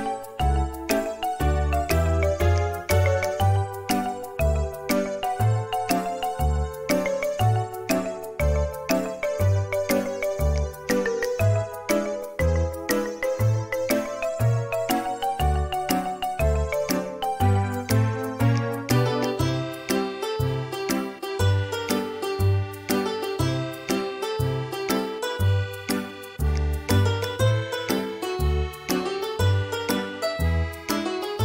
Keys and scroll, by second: 4.5 space, 6.9 m, 27.1 space, 29.8 space.